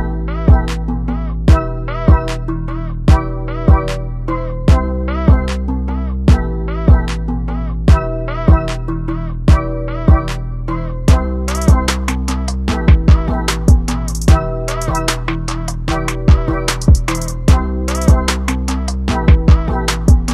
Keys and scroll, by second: 0.4 ctrl+t.